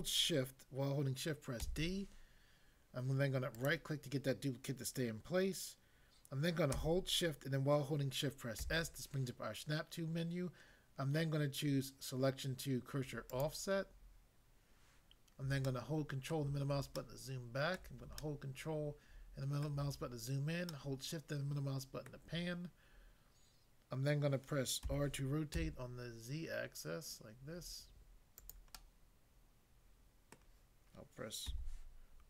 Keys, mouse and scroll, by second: 1.6 shift+d, 3.6 right click, 8.6 s, 13.3 click, 15.7 ctrl+middle click, 17.0 shift+middle click, 20.7 shift+middle click, 24.8 r, 25.5 z, 28.4 click, 28.7 middle click, 30.3 middle click, 31.4 r.